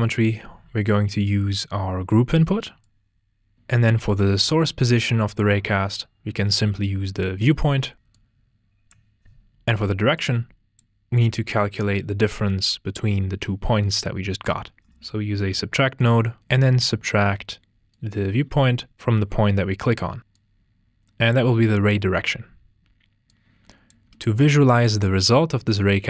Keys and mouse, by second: 1.2 drag, 2.8 click, 7.2 drag, 8.1 click, 10.1 drag, 15.9 click, 16.9 click, 17.9-18.4 drag, 23.2 click.